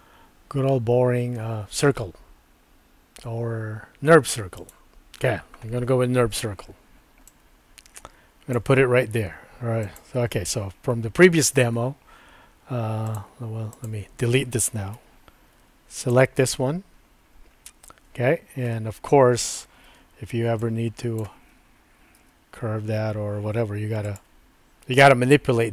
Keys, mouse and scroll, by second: 7.3-8.6 drag, 9.8 click, 13.0 click, 14.9 Delete, 16.0 click, 19.9 Tab, 20.6 click, 22.2 r.